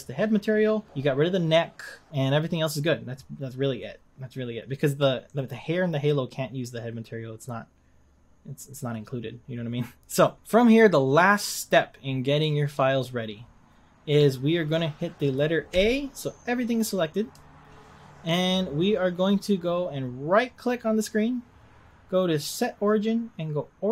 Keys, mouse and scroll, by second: 0.7-2.1 scroll down 1, 2.1-4.6 scroll down 1, 5.4 click, 10.2 click, 10.4-11.3 scroll down 3, 11.3-12.7 scroll down 2, 12.7-13.3 scroll down 1, 13.3-14.0 scroll down 4, 14.0-14.4 scroll up 3, 15.1 scroll up 2, 15.7 a, 18.0-19.1 scroll down 3, 19.1-19.6 scroll down 1, 19.6-20.0 scroll up 2.